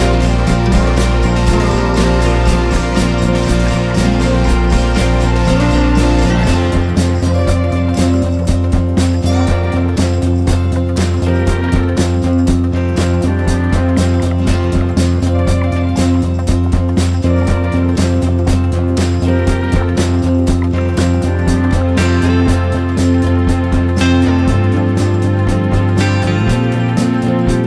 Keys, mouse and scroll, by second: 0.4 Tab, 1.1 click.